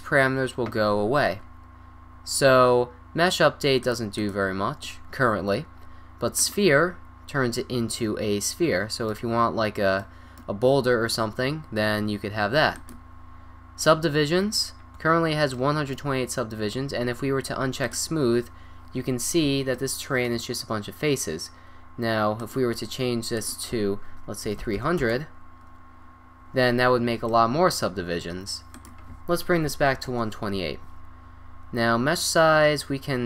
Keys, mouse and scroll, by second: 1.8 middle click, 1.8 scroll down 1, 2.5 middle click, 2.5 scroll up 1, 4.0-6.0 drag, 7.4 click, 8.0-10.6 middle drag, 12.0 middle click, 13.0 drag, 13.5-14.5 middle drag, 18.1 click, 18.4-19.8 middle drag, 22.4-26.3 drag, 24.8 0, 27.3-27.8 middle drag, 28.8 click.